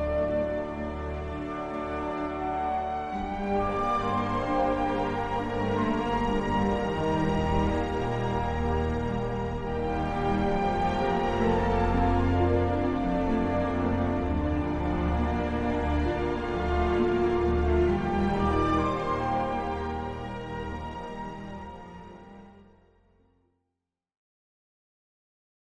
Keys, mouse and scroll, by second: 1.4 d, 4.3 a, 7.5 d, 10.9 d, 16.4 click, 18.2-24.7 drag.